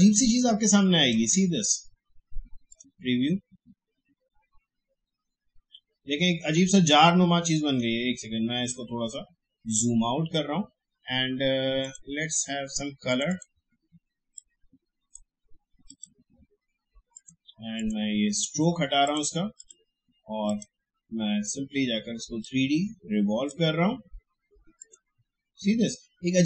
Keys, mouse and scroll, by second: 7.6 click, 8.8 alt+scroll down 1, 11.8-24.8 drag.